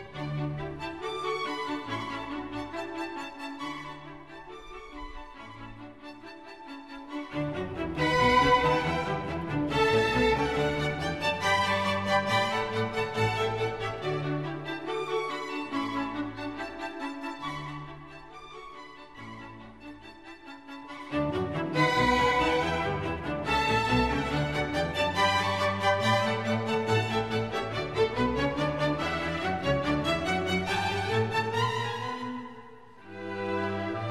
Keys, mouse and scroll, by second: 1.9 right click, 4.9 right click, 7.5 ctrl+-, 7.6 ctrl+-, 7.9 ctrl+-, 8.0 ctrl+-, 8.4 ctrl+-, 8.5 ctrl+-, 8.8 ctrl+-, 11.5 right click, 19.8 double click, 24.3 double click, 29.8 double click.